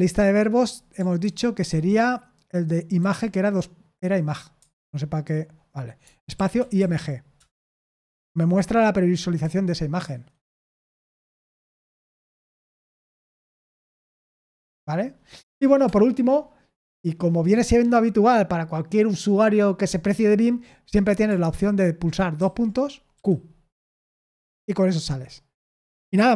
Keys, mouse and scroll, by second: 1.2 ctrl+d, 1.6 ctrl+d, 4.5 Escape, 6.0-7.2 typing, 7.3 Return, 9.4 Escape, 10.0 Escape, 11.5 j, 12.3 Escape, 12.8 Escape, 13.4 q, 14.1 Return, 15.3 Escape, 15.8 BackSpace, 22.3 shift+;, 23.1 q, 24.1 Return.